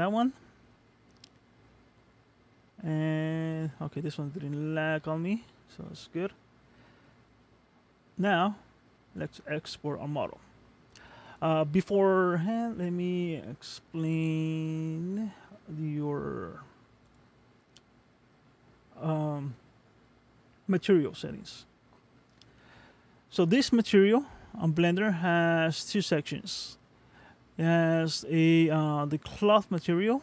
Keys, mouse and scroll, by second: 7.1 middle click, 9.2 click, 17.0 click, 20.5-22.0 scroll down 16, 22.0-24.1 scroll up 24, 24.1-25.1 scroll up 5, 25.1 middle click, 29.6 middle click.